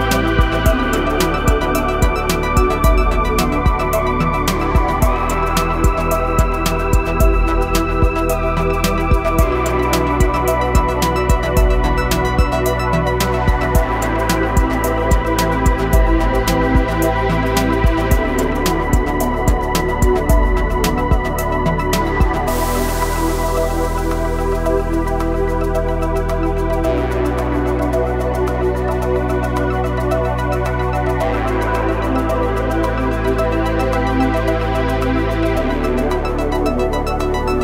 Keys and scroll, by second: 1.4 ctrl+r, 3.1 Escape, 4.6 s, 9.2 e, 12.2 e, 21.4 e, 23.9 s, 27.5 e, 29.4 s, 32.1 e.